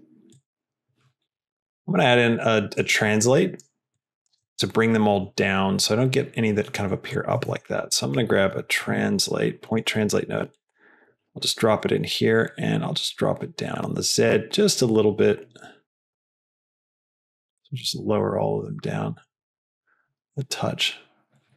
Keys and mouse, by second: 0.2-0.9 drag, 1.7 middle click, 2.3 click, 3.3 click, 3.8 click, 4.3 click, 7.4 shift+a, 12.5-19.6 drag, 19.9 click.